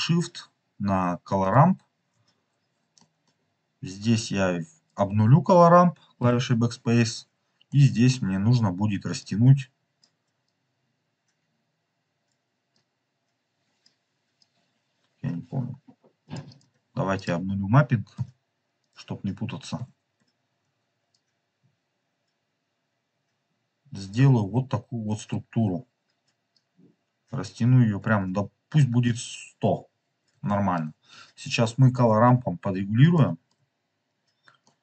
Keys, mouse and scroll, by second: 1.6 ctrl+shift+click, 2.2 scroll up 2, 2.9 middle click, 3.3-4.3 scroll up 2, 4.3-4.7 scroll up 1, 4.8 click, 6.3 BackSpace, 7.7 middle click, 9.2 click, 10.4 click, 12.7 click, 14.3 click, 16.4 click, 18.1 BackSpace, 18.7 click, 19.7 BackSpace, 21.1 click, 24.4-24.8 scroll up 3, 26.4 click, 28.1 click, 28.1-28.7 scroll down 3, 28.7 middle drag, 29.7 scroll up 2, 30.4-30.7 shift+middle drag, 31.0 scroll down 4, 31.1 middle click, 31.5 middle click, 33.1 shift+middle click, 33.4 shift+middle click, 33.8 scroll up 3, 34.6 middle click.